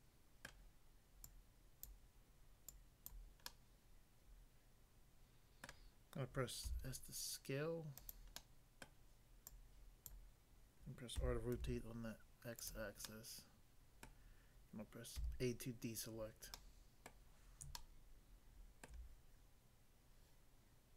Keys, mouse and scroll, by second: 0.5 middle click, 1.2 click, 1.8 click, 2.7 click, 3.1 click, 3.5 middle click, 5.6 middle click, 6.6 s, 8.0 click, 8.1 click, 8.4 middle click, 8.8 middle click, 9.4 click, 10.1 click, 11.2-11.5 typing, 12.6 click, 12.7 click, 13.1 middle click, 14.1 middle click, 15.1 a, 16.6 middle click, 17.1 middle click, 17.7 shift+middle click.